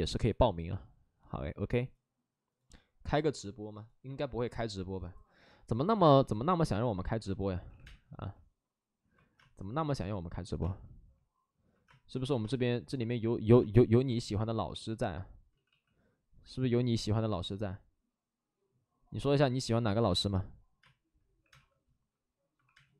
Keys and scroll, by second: 7.1-8.1 typing, 9.1 ctrl+z, 9.3 space, 15.4 ctrl+z, 15.4 space, 17.7 ctrl+z, 19.2 ctrl+z, 19.8 ctrl+z, 20.7 space, 21.3 3, 22.5 space, 22.5 3.